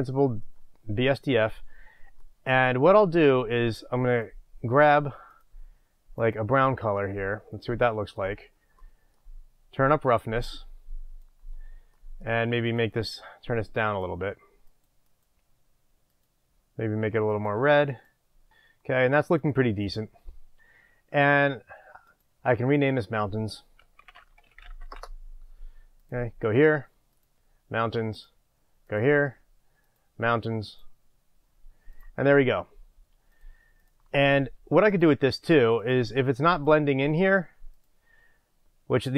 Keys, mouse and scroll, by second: 0.6-2.2 scroll up 1, 6.2 click, 10.0-12.1 drag, 12.1-12.8 middle drag, 12.8 click, 18.5 click, 19.0 middle click, 19.5 click, 19.9 click, 24.9-26.3 drag, 24.9 s, 25.2 Return, 27.2-29.0 drag, 29.9-32.0 drag, 33.4 click, 33.9 click.